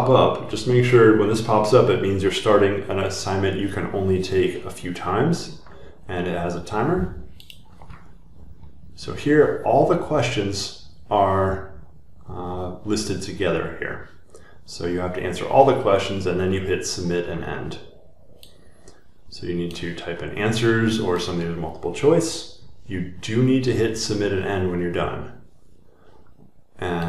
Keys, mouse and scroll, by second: 8.8 click, 12.3 scroll down 1, 18.8 click, 20.0 click, 20.2-21.1 scroll, 21.2-21.8 scroll, 21.9 click, 22.0-22.3 scroll, 22.4-23.1 scroll down 1.